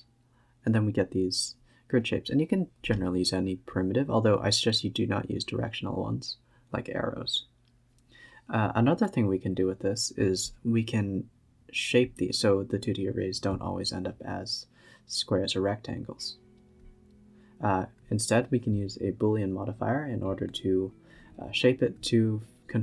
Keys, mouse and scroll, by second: 0.1-0.6 scroll up 2, 1.3 click, 1.4 shift+d, 2.0-2.5 scroll up 7, 2.5 g, 4.4-6.3 drag, 6.3 s, 8.1-10.0 drag, 10.0-11.6 scroll down 5, 11.6-13.5 drag, 13.5-13.8 scroll up 7, 13.9 a, 14.0 a, 14.2 click, 14.4-14.8 scroll down 1, 14.8 s, 15.5 scroll up 2, 15.7 s, 17.0-22.4 drag, 22.4 g.